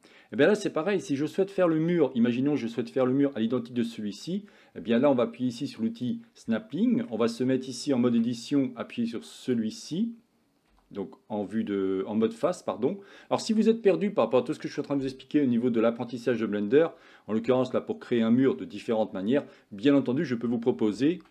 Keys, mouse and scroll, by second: 1.2-1.6 shift+middle drag, 1.8-2.8 middle drag, 3.6-4.2 middle drag, 6.1 click, 6.8 middle click, 8.2 Tab, 10.9 3, 17.6 middle click.